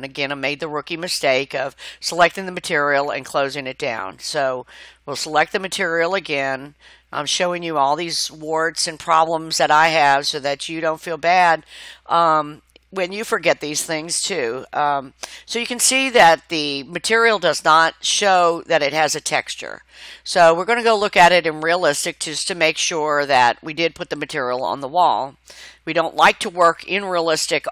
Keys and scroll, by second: 6.7 t, 17.8 Escape.